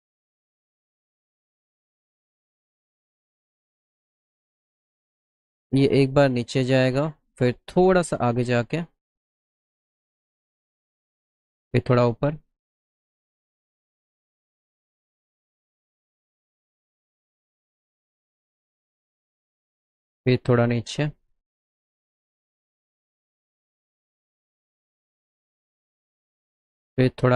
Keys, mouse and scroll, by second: 0.8 click, 6.5 click, 11.0 shift+click, 19.4 click, 21.1 click, 21.7 middle click, 22.5 scroll up 1, 23.0 middle click, 23.5 middle click, 23.9 middle click, 25.3 middle click.